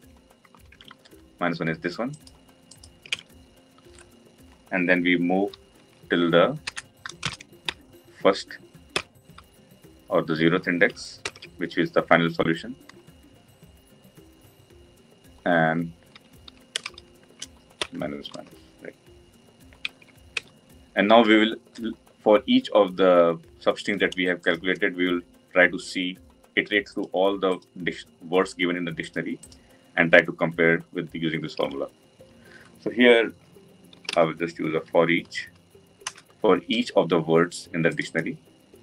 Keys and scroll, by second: 11.2 ctrl+alt+l, 19.8 Tab, 36.1 Return.